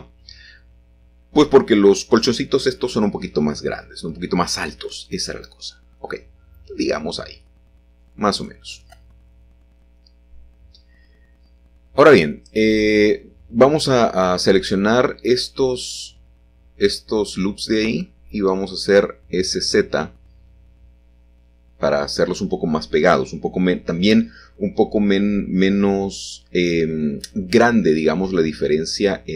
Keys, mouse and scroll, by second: 1.8 middle click, 2.3 s, 2.5 z, 5.6 click, 7.3 shift+middle click, 8.5 shift+middle click, 8.8-9.5 scroll up 1, 10.1-11.1 shift+middle drag, 10.7 typing, 11.2 alt+shift+click, 11.9 alt+shift+click, 15.4-17.1 middle drag, 16.0 typing, 17.1 typing, 18.8 click, 22.2-22.5 scroll down 1, 23.3-24.2 scroll down 1, 24.2-25.8 scroll down 1, 25.1-27.2 middle drag, 27.5 Tab, 27.8-28.9 drag.